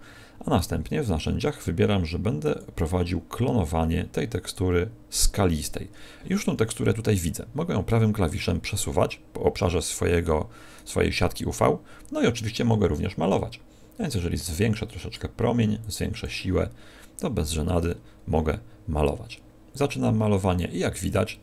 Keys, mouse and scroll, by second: 0.7-1.5 scroll down 6, 2.3 click, 7.8 right click, 14.4 click, 15.7 click, 17.9-18.4 scroll down 3, 18.2-18.7 scroll up 5, 19.2 click.